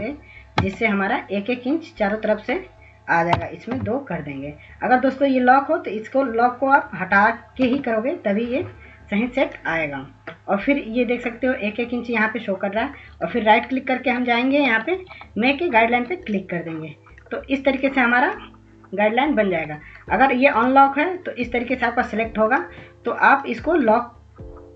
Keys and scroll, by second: 0.0-0.1 typing, 2.1-2.8 typing, 6.7 Return, 14.0 ctrl+s, 17.9 ctrl+s, 24.6 ctrl+s.